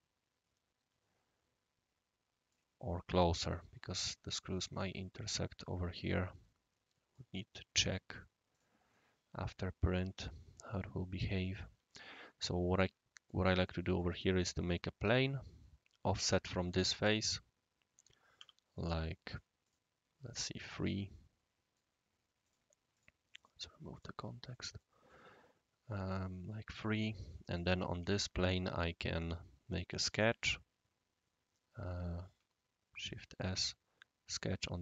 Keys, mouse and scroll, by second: 6.1-7.1 right drag, 8.5 click, 8.9-9.5 right drag, 9.9 click, 11.3 click, 12.1-13.3 right drag, 13.6-14.0 middle drag, 18.4 3, 19.6 click, 20.3 right click, 21.2-21.8 right drag, 22.4 click, 22.9 click, 23.3 click, 23.9 click, 24.5 middle click, 24.7 middle click, 25.1-26.8 right drag, 27.3 right click, 28.0 typing, 28.3 shift+right drag, 29.2 click, 32.9 typing.